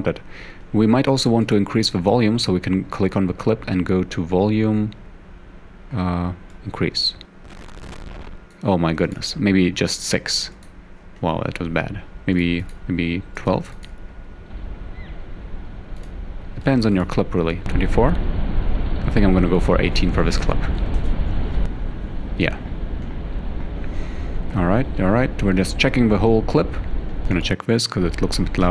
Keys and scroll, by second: 10.2 6, 13.2-14.1 typing, 16.3-17.1 typing, 20.3-23.0 typing.